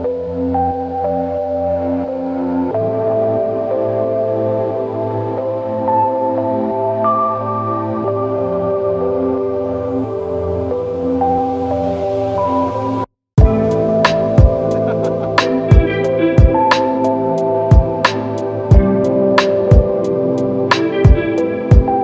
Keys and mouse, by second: 3.1 alt+shift+click, 4.2 ctrl+alt+click, 5.6 typing, 7.3 typing, 8.4 right click, 10.4 typing.